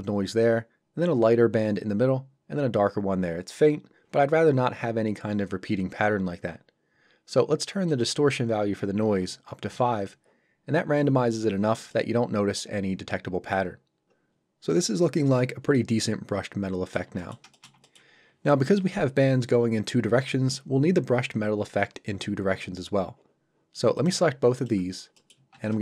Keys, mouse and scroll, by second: 7.9 click, 9.2 KP_5, 9.7 Return, 11.9 middle click, 14.3 scroll up 1, 14.7 middle click, 17.1 ctrl+middle click, 23.9 click, 24.5 shift+click, 24.9 scroll down 1, 25.1 middle click, 25.7 middle click.